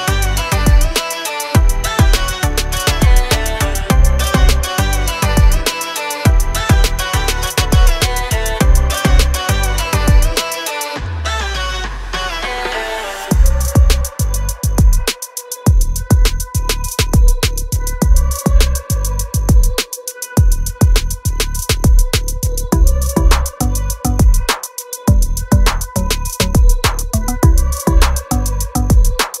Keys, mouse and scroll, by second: 6.2 click, 16.1 click, 18.1 click, 19.5 F9, 22.2 click, 24.1 ctrl+click, 25.4 click, 26.2 ctrl+o, 27.8-28.8 scroll up 1, 28.9 click.